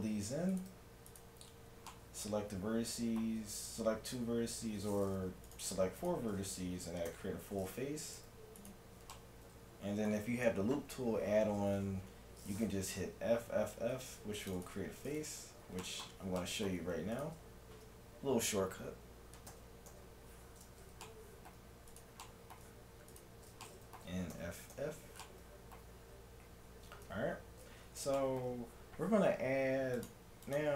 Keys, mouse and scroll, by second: 0.3 middle click, 0.5-3.0 right drag, 3.0 middle click, 5.5-7.8 right drag, 7.1 f, 8.1-9.1 right drag, 9.1-13.9 middle drag, 13.9 ctrl+r, 15.1 right click, 15.8-16.9 drag, 15.8-17.2 middle drag, 17.2-19.0 right drag, 17.3 middle click, 19.5 f, 19.9 f, 21.1-23.4 middle drag, 22.0-23.4 right drag, 23.4-24.9 drag, 24.4 f, 24.7 f, 25.1-27.1 middle drag, 26.1 a, 27.1 KP_1, 27.1 middle click, 30.0-30.7 drag.